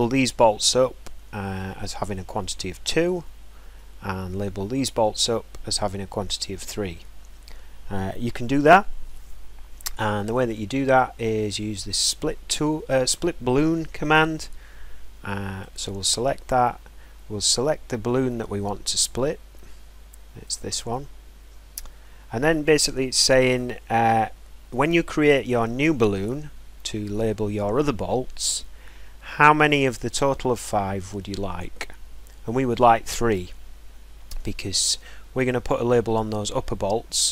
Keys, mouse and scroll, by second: 1.8-2.7 scroll, 4.1-4.5 scroll, 7.7 scroll, 8.4-11.0 scroll, 16.0 click, 20.9 click, 35.3-37.3 middle drag.